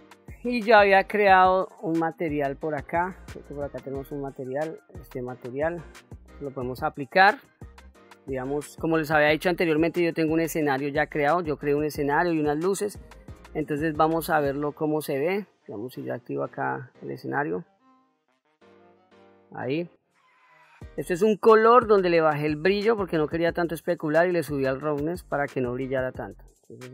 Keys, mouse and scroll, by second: 2.0 click, 3.8-8.7 drag, 9.9-10.6 shift+middle drag, 14.2 click, 16.6 click, 18.6-19.0 scroll down 2, 19.0-20.9 middle drag, 26.2-26.9 scroll up 1.